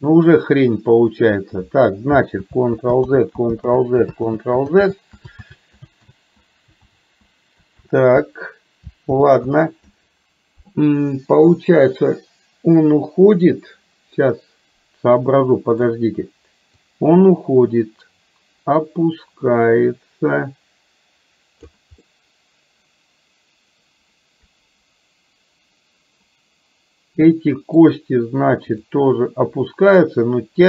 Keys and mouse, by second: 2.5 ctrl+z, 3.3 ctrl+z, 3.9 ctrl+z, 4.5 ctrl+z, 6.4 ctrl+z, 7.1 ctrl+z, 8.1 ctrl+z, 9.4 ctrl+z, 14.3-15.9 middle drag, 17.3-22.4 drag, 22.5-27.9 middle drag, 29.4-30.6 drag.